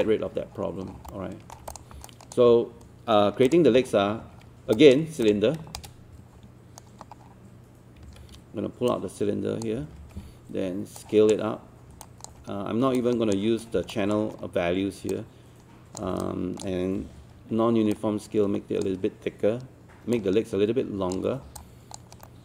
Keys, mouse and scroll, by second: 0.9 scroll down 1, 1.1 alt+middle click, 1.7 click, 2.1 alt+click, 3.5 click, 3.8 scroll down 1, 4.8 alt+click, 5.8-7.1 shift+right drag, 7.2-8.1 scroll down 1, 8.1 w, 8.9 click, 9.8 e, 12.1 alt+click, 12.5-13.0 scroll up 1, 13.0 click, 13.9 alt+middle click, 14.5-15.1 scroll up 1, 15.1 click, 16.2-21.4 alt+drag, 21.4 scroll down 1, 21.6 alt+click, 22.3 alt+middle click.